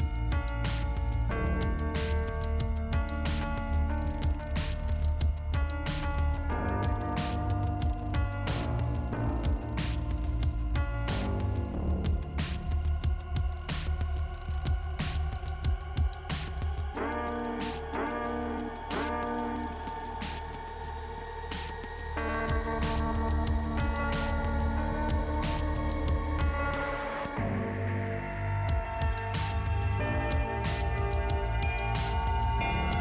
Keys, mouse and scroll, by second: 1.0 middle click, 3.2 click, 3.2 ,, 3.7 click, 6.5-7.6 scroll up 2, 8.5 click, 8.6 click, 10.1 click, 14.4 click, 14.5 click, 15.4 click, 15.5 click, 16.7 click, 18.4 click, 20.9 click, 21.0 click, 21.7 click, 22.8 click, 23.1 click, 24.7-25.3 scroll up 1, 26.2 click, 27.8 click, 30.9 click, 32.0 click, 32.1 click.